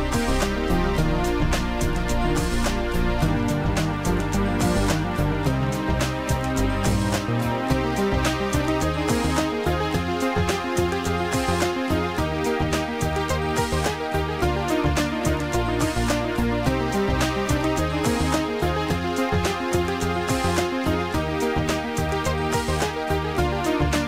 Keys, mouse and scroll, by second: 0.5 click, 2.8 click, 5.6 Return, 7.7 click, 11.2 click, 12.6 Return, 17.3 click, 17.6 Return, 20.0 click, 20.1 click.